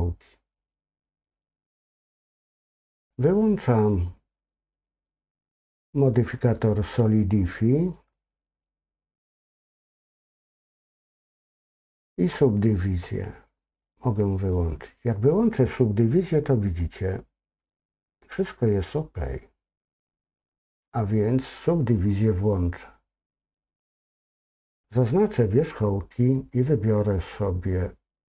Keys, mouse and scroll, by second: 0.6 click, 8.1 click, 13.6 click, 20.4 click, 23.6 click, 23.8 click.